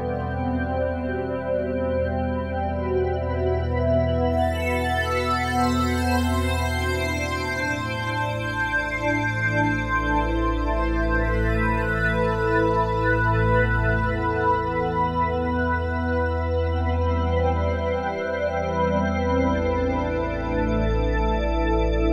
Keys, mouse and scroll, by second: 1.4 click, 3.8-6.7 typing, 7.4 Return, 8.4 typing, 10.0 click, 10.1 typing, 11.4-16.3 drag, 16.0-18.3 typing, 19.7 click, 20.1 click, 20.6 click, 21.5 typing.